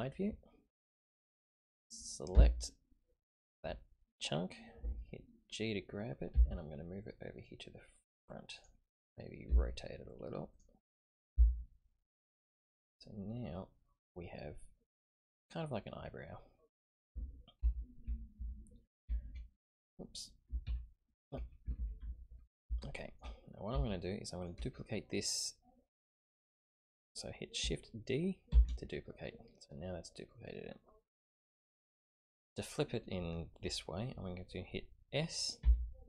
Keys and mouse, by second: 2.3 l, 6.3 g, 10.5 r, 11.3 g, 13.0-17.0 middle drag, 17.6 KP_1, 18.0 KP_3, 21.0 alt+KP_3, 21.8 ctrl+KP_3, 22.8 shift+middle click, 23.9 shift+click, 28.5 shift+d, 35.6 s.